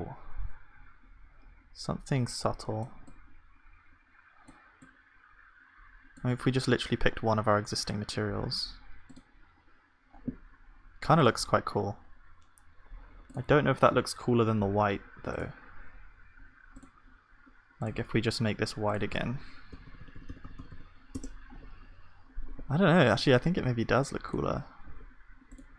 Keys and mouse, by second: 20.0 f, 20.1 f, 20.4 f, 20.5 f.